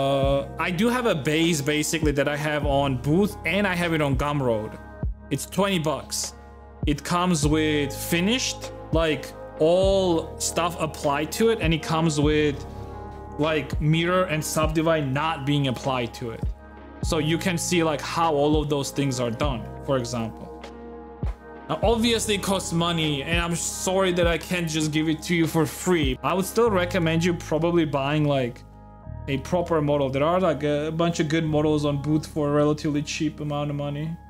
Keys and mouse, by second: 26.1 shift+middle click, 26.7 middle click, 27.0 shift+middle click, 28.1 shift+middle click, 28.8 middle click, 29.2 shift+middle click.